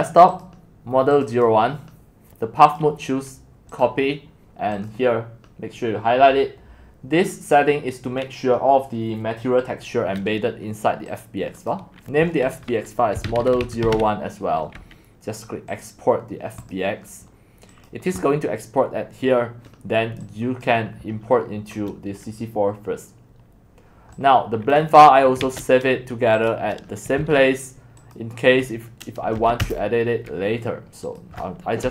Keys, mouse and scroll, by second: 0.0 click, 0.4 click, 1.2 click, 1.5 click, 11.2-13.2 drag, 12.9-14.4 typing, 15.8-20.3 drag, 20.4 middle click, 20.5-25.4 drag, 25.4 ctrl+shift+s, 26.5 click, 27.2 ctrl+c, 28.2-29.4 drag, 29.4 ctrl+v, 29.6 Return, 31.2 click, 31.8-31.9 typing.